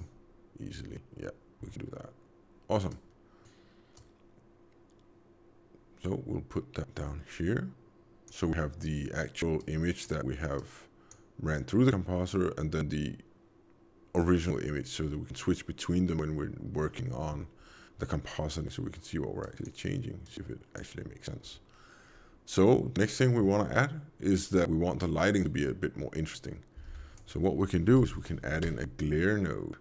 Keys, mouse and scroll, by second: 2.9 click, 3.9 click, 9.5 click, 10.5 click, 19.3 click, 20.1 click, 26.7 shift+a.